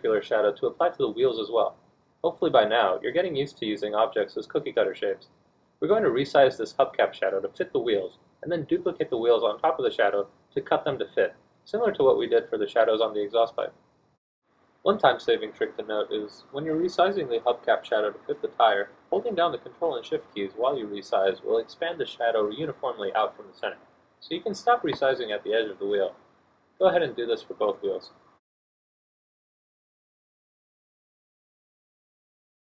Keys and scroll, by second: 19.8 d, 23.4 Caps_Lock, 28.0 d.